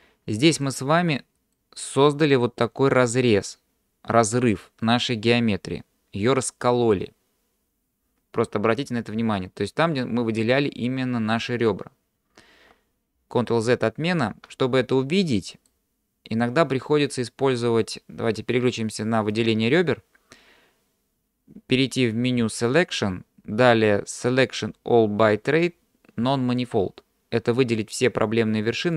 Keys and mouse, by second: 0.6 middle click, 14.1 ctrl+z, 15.0 middle click, 19.3 click, 22.8-28.9 drag.